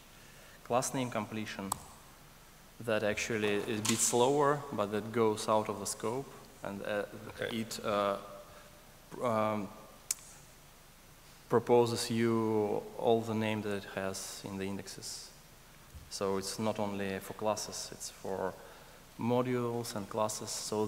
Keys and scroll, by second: 2.1 ctrl+alt+space.